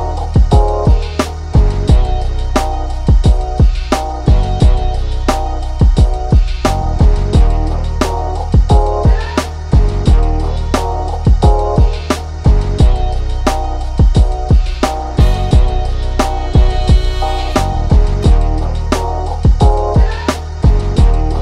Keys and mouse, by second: 4.2 click, 5.1 click, 6.2 click, 7.0 click, 10.1 click, 11.6-16.6 drag, 18.1 click, 19.4 click, 19.7 ctrl+z.